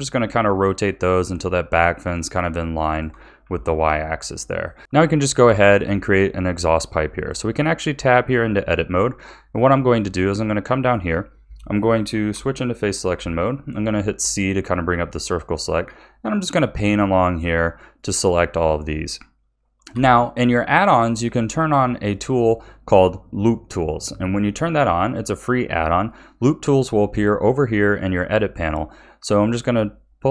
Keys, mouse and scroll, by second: 3.4 a, 3.9-4.8 middle drag, 5.5-7.1 shift+middle drag, 7.1 click, 7.7 Tab, 9.0 middle click, 9.8-10.3 scroll up 5, 10.7-12.3 shift+middle drag, 12.3 3, 13.1 c, 19.9 n, 22.0 click, 29.4 click.